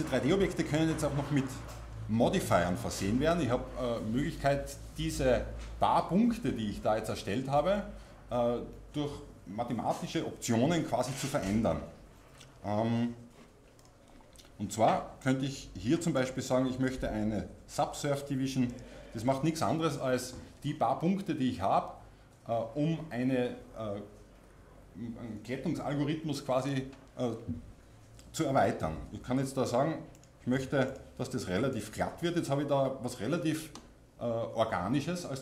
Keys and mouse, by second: 1.4-18.8 drag, 15.2-18.8 right drag, 30.7-35.4 drag.